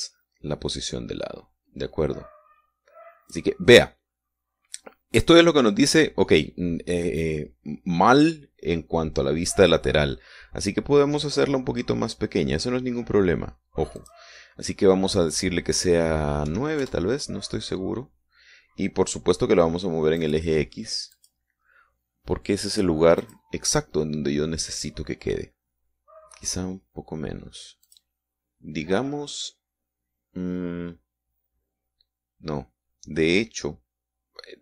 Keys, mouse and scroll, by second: 11.8-12.4 scroll down 1, 12.6-13.0 scroll down 1, 13.4-15.3 scroll down 2, 15.3 click, 17.8 KP_9, 18.2 KP_Enter, 21.6 click, 22.5 click, 24.6 click, 29.2 click.